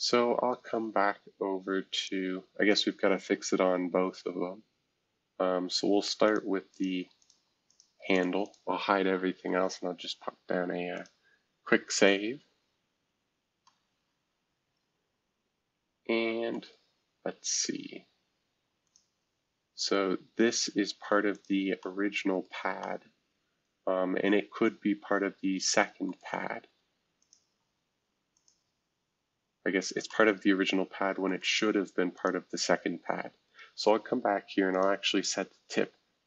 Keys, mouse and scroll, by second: 0.0-1.6 drag, 1.9-3.1 drag, 3.1-3.6 scroll down 2, 3.6-5.7 scroll up 3, 6.2 click, 7.3 space, 9.5 ctrl+s, 10.9 click, 12.0 scroll down 1, 13.3 scroll up 1, 13.6-18.4 middle drag, 16.9-17.5 scroll up 1, 17.5-18.4 scroll up 1, 18.8-20.4 drag, 20.5 space, 21.3 click, 22.4 middle click, 26.1-27.2 middle drag, 27.2 click, 28.3 click, 29.2 scroll down 2, 29.6 scroll up 2, 30.0-32.1 middle drag, 32.1 click, 32.5 space, 33.4 right click, 34.7 click.